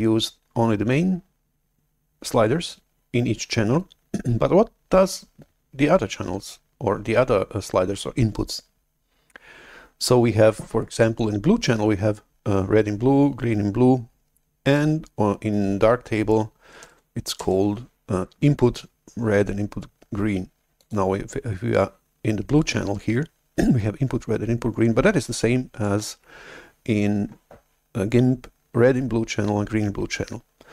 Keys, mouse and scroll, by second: 17.8 alt+Tab, 20.8 click, 25.9 alt+Tab.